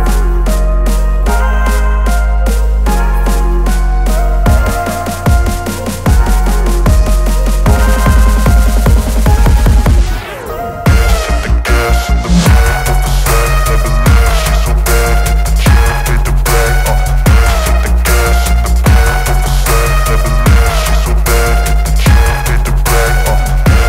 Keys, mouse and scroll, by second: 3.0-3.7 drag, 4.9-5.7 typing, 13.7 v, 17.7 shift+click, 19.5 ctrl+g, 21.8 click.